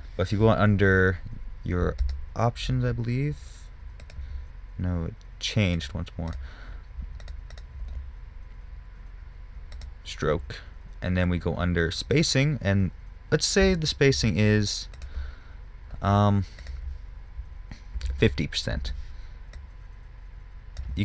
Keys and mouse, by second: 4.4-10.2 drag, 10.2-12.6 middle drag, 12.6-17.0 drag, 17.0-18.6 middle drag, 18.6-20.9 drag.